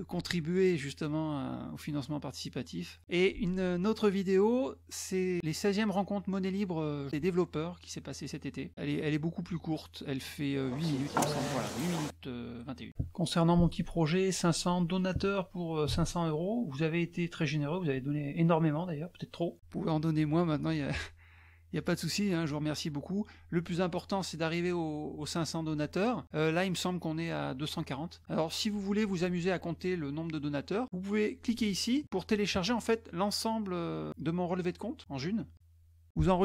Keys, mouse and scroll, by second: 0.4 scroll up 1, 1.6-2.3 scroll down 2, 2.8 scroll down 1, 6.5 click, 8.0 scroll down 2, 10.4 click, 12.0 click, 14.6 click, 18.4 click, 19.0 click, 32.3 click.